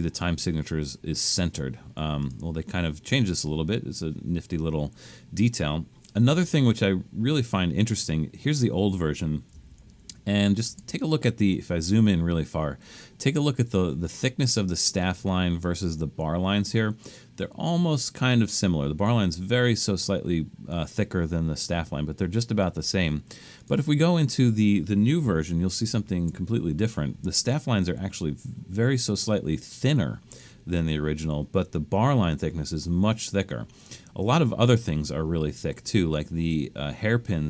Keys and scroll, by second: 9.7 super+=, 10.6 super+=, 25.4 super+=, 25.9 super+=.